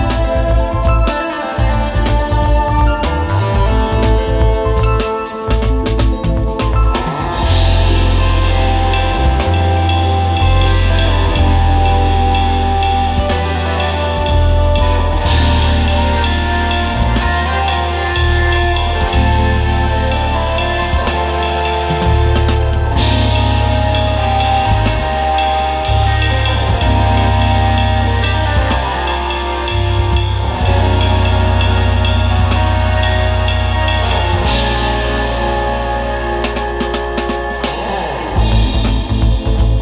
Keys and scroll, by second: 1.1 super+z, 4.7 space, 4.9 space, 5.1 space, 5.9 space, 8.4 super+z, 10.0 super+[, 12.9 super+], 15.2-18.1 typing, 19.2 super+z, 22.6 super+g, 23.2 super+z, 23.6 super+z, 24.2 super+z, 24.6 space, 25.1 super+space, 27.1 space, 27.7 space, 29.4 super+g, 30.5 space, 32.7 space, 33.9 super+z, 34.5 space, 35.0 alt+super+space, 35.9 super+z, 36.1 alt+super+space, 37.2-39.8 typing.